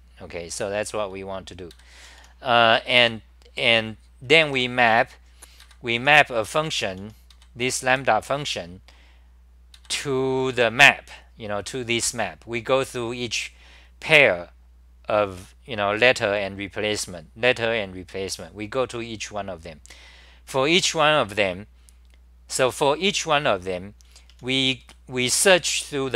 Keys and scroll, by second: 1.7 ctrl+g, 2.2 t, 3.0 m, 4.0-8.4 typing, 5.6 ctrl+g, 9.8-11.3 typing, 24.1 n, 24.3 n, 24.8 1.